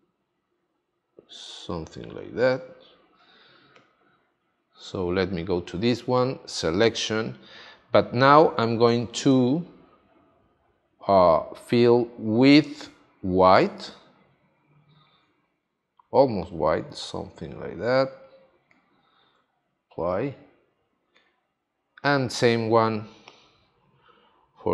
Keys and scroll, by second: 11.0 shift+F5.